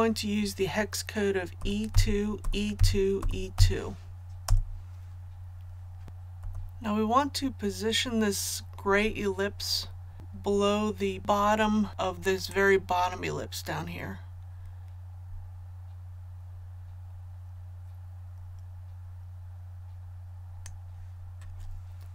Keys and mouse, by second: 1.5 e, 1.9 KP_2, 2.4 KP_2, 6.0 click, 6.3 v, 12.5-20.8 drag.